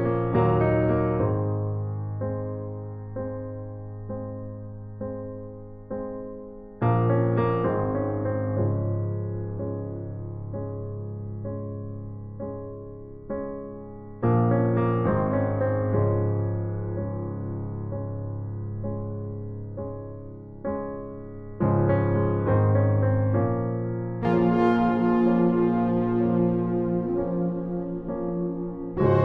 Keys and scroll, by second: 2.7 ctrl+alt+shift+e.